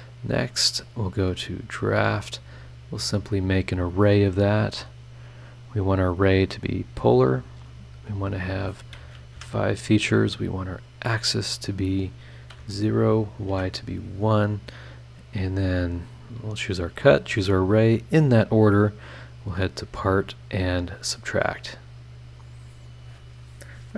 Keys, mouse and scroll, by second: 0.9 click, 2.1 click, 3.1 click, 5.6 click, 5.9 click, 6.5 click, 8.4 click, 9.3 KP_5, 10.8 click, 11.7 click, 12.5 KP_0, 13.1 click, 13.5 KP_1, 14.2 click, 16.4 click, 16.7-17.2 scroll up 1, 17.2 ctrl+click, 18.4 click, 19.6 click, 20.9 click.